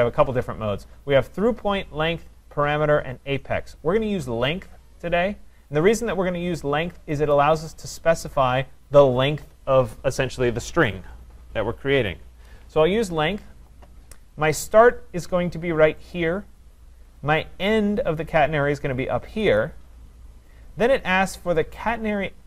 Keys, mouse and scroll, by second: 7.4-12.4 drag, 16.2-22.4 drag.